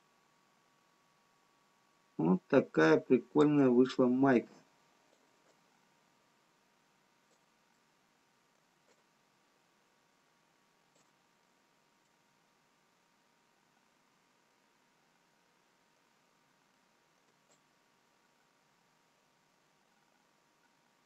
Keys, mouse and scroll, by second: 4.7 click, 5.6 click, 8.9 middle click, 9.9 shift+click, 12.2 middle click, 13.8 scroll down 4, 15.5 middle click, 16.8 middle click, 16.8 scroll up 1, 17.9 shift+click.